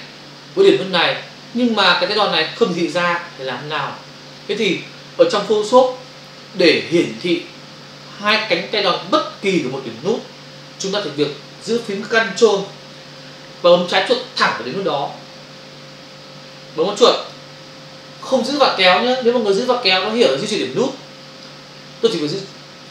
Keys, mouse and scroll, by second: 17.4 ctrl+click.